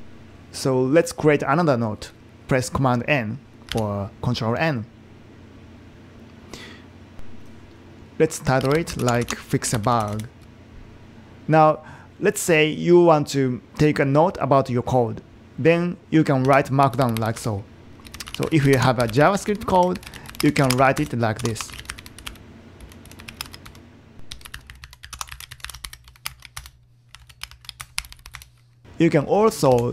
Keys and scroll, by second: 3.7 super+n, 8.4-10.5 typing, 16.6 Return, 17.4-29.9 typing, 27.2 super+BackSpace, 29.8 super+Right.